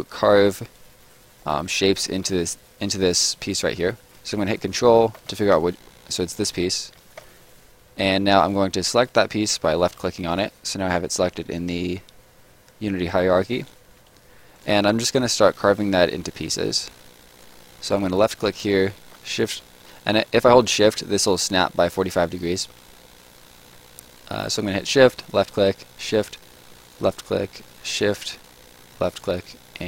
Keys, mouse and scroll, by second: 2.0 right click, 8.9 click, 14.5 click, 18.1 click, 19.1 shift+click, 25.1 shift+click, 26.3 shift+click, 29.0 shift+click.